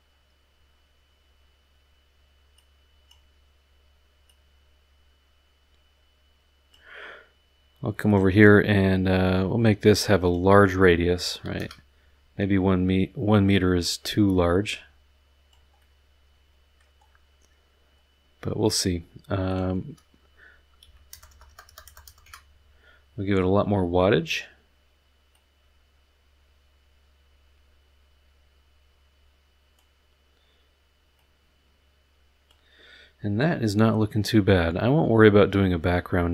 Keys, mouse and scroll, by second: 0.0 middle drag, 0.0-0.9 scroll up 4, 0.7 middle click, 2.5-3.3 drag, 4.3-6.9 drag, 8.1 click, 10.2 click, 11.4 KP_1, 11.6 KP_Enter, 14.7-15.7 drag, 15.8-17.0 middle drag, 17.0 scroll down 1, 17.8 middle click, 19.5 click, 20.8 KP_1, 21.1 KP_0, 22.2 KP_Enter, 25.3-29.9 drag, 31.1-32.7 drag.